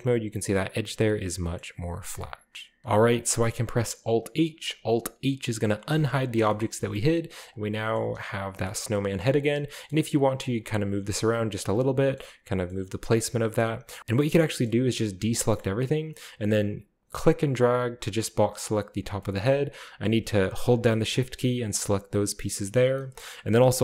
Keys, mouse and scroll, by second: 0.9-1.6 scroll down 1, 1.1-2.0 middle drag, 2.1-2.8 middle drag, 2.1-2.8 scroll down 1, 2.8 ctrl+b, 5.9 alt+h, 6.3-7.1 scroll down 1, 6.5-7.4 shift+middle drag, 7.5-7.9 drag, 7.9-8.9 scroll up 1, 9.7-10.6 scroll up 1, 9.8 middle click, 10.1 g, 10.5 middle click, 10.9 alt+r, 11.6 middle drag, 11.8-12.2 middle drag, 12.2 right drag, 12.7-13.9 scroll up 1, 13.6-14.0 shift+middle drag, 14.0 ctrl+z, 14.0-14.8 drag, 14.8-16.1 middle drag, 14.8-15.3 scroll up 1, 15.2 ctrl+z, 15.3-16.4 scroll down 1, 17.2-19.0 drag, 19.4-20.9 scroll up 2, 22.1 shift+middle click, 22.3-22.8 shift+right drag.